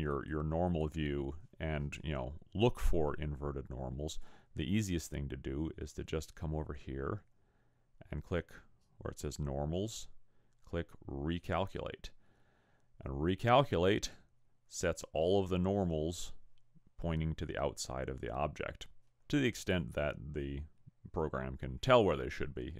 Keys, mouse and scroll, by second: 0.1 click, 0.7 click, 11.4 click.